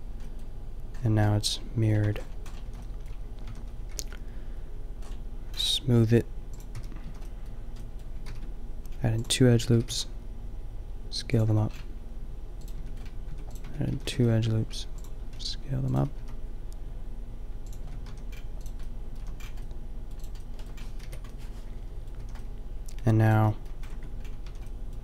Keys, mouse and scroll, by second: 2.1 Tab, 2.6 a, 3.4 a, 3.9 t, 6.6 click, 6.8 t, 7.1 a, 8.3 ctrl+r, 9.8 s, 11.0 click, 11.5 Tab, 11.7 click, 12.5 click, 12.7 Tab, 13.4 Tab, 13.7 Tab, 14.0 a, 14.2 ctrl+r, 15.3 s, 16.1 s, 17.8 Tab, 18.0 a, 18.6-19.2 middle drag, 19.2 a, 21.0 KP_5, 22.2 a, 24.0 Tab, 24.5-25.0 typing.